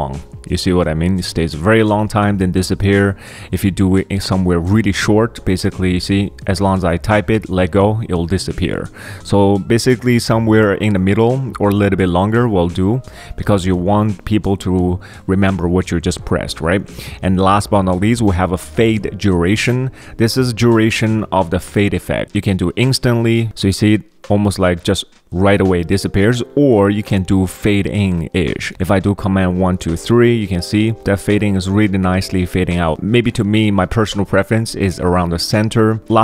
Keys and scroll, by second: 5.2 super+1, 5.4 super+2, 6.2 super+1, 6.8 super+1, 8.8 super+1, 12.7 super+2, 23.2 super+1, 28.7 super+1, 29.2 super+1, 29.6 super+2, 29.9 super+3, 36.0 super+1, 36.0 super+2.